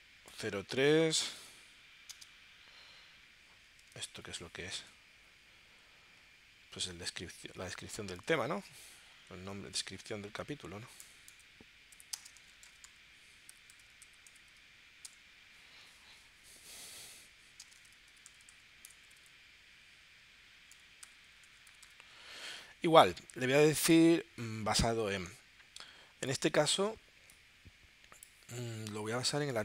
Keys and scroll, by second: 0.0-1.0 typing, 2.1 space, 4.1 super+Tab, 10.7 Right, 12.1 shift+space, 12.3 shift+d, 12.9 r, 13.5 i, 17.6 space, 17.8 c, 20.7 /.